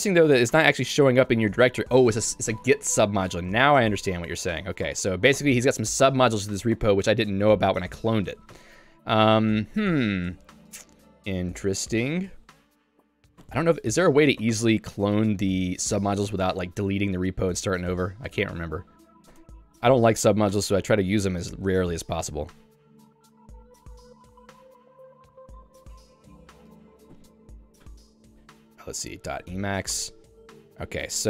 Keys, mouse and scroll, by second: 1.2 h, 1.5 h, 4.8 ctrl+o, 5.4 ctrl+o, 6.7 ctrl+o, 8.6 super+e, 11.1 j, 11.7 j, 12.6 l, 13.4 l, 15.4 j, 15.6 j, 22.3 a, 22.9 space, 23.8 Tab, 24.8 Tab, 25.1-28.2 typing, 27.3 Tab, 29.3-30.9 typing, 29.5 Tab, 30.0 Return.